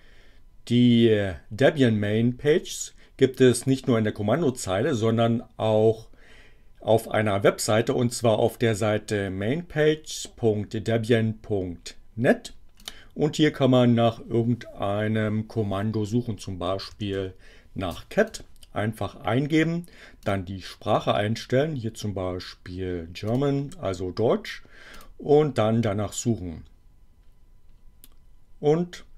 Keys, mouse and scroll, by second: 12.8 click, 16.5-17.7 typing, 18.2 click, 20.2 click, 23.3 click, 24.9 click.